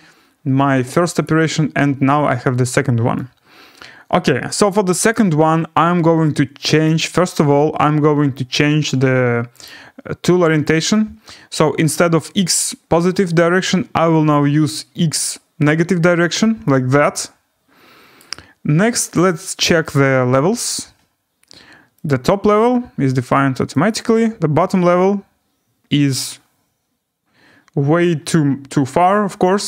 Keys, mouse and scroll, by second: 1.2 click, 5.1 right click, 6.8 click, 9.6 click, 10.6 click, 14.3 click, 16.2 click, 18.1 right click, 19.2 click, 19.9 right click, 20.1-21.8 scroll, 22.0 click, 24.3 click, 24.3 scroll.